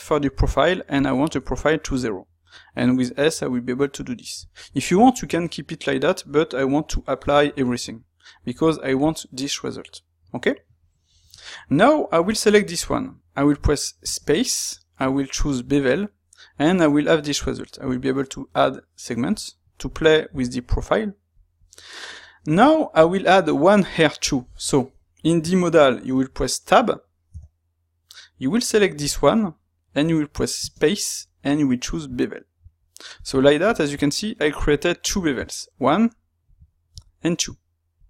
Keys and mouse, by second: 7.2 a, 8.5 Tab, 11.3 shift+middle click, 12.2 click, 14.0 space, 22.7 shift+middle click, 26.6-29.0 middle drag, 29.0 click, 32.1 click.